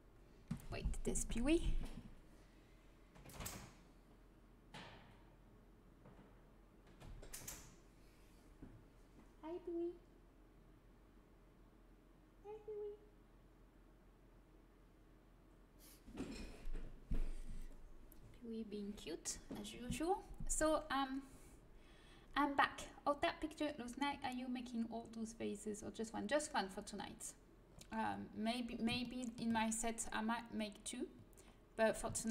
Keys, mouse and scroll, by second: 27.6-31.4 middle drag, 31.4-32.3 middle drag.